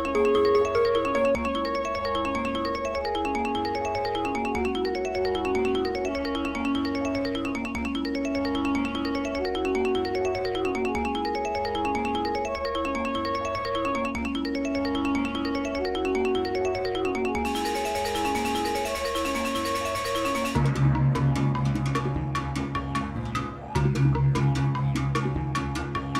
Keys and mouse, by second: 2.8-3.7 drag, 4.8-5.5 drag, 5.9-7.4 drag, 8.5 x, 10.3 Page_Up, 10.7 Page_Up, 11.7 Page_Up, 12.4 space, 16.3-20.3 drag, 24.9 g.